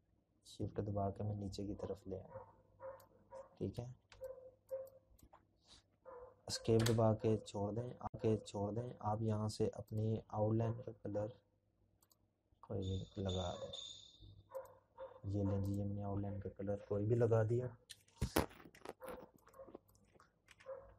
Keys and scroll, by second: 3.5 Escape, 13.6 ctrl+-, 13.8-17.3 ctrl+-, 16.2-18.3 z.